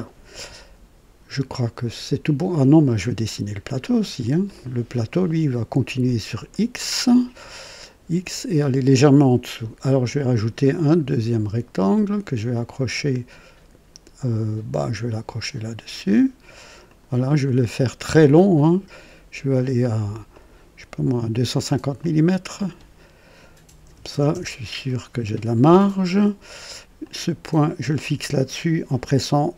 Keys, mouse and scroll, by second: 3.0 right click, 4.5 right click, 6.5-7.7 right drag, 10.3 click, 15.4 click, 16.8 click, 17.4 right click, 20.3 click, 22.0 click, 23.6 KP_2, 23.8 KP_5, 24.1 KP_0, 24.3 KP_Enter, 27.0 click, 27.7 typing, 28.0 click.